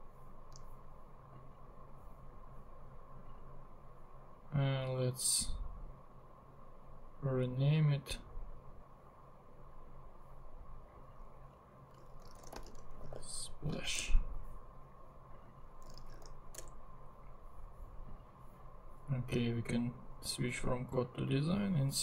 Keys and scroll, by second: 11.9-13.5 typing, 14.0 Return, 15.8-16.2 typing, 16.6 Return.